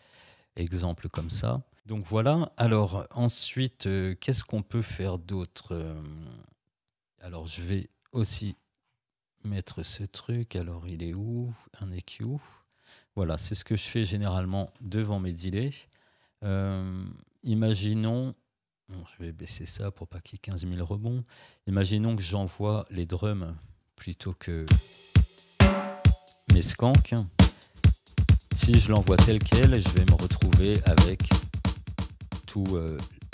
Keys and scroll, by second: 1.1 Return, 24.7 space, 31.3 space.